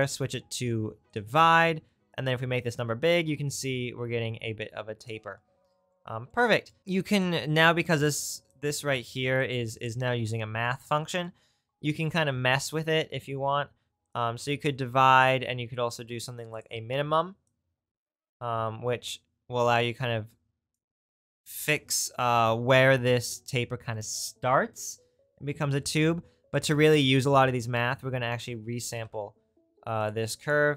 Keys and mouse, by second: 9.7-26.0 drag, 27.9 shift+a, 30.4 right click.